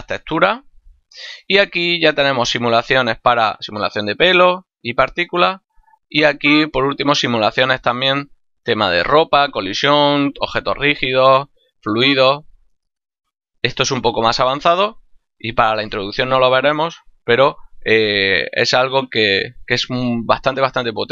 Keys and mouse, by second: 0.8 click, 5.1 click.